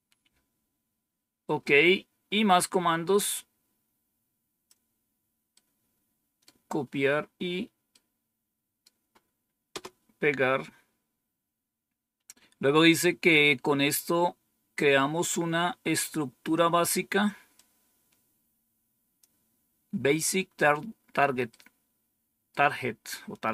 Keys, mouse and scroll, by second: 3.3-4.6 drag, 5.5 right click, 7.8 right click, 9.7 Return, 11.8 scroll down 1, 17.5-19.2 drag, 21.4-22.5 right drag.